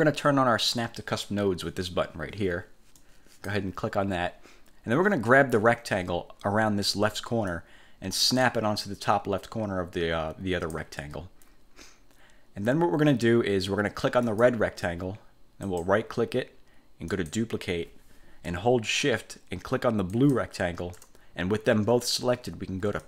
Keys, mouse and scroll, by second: 3.1 click, 7.6-11.1 drag, 14.4 click, 15.8 click, 17.2 click, 20.2 shift+click.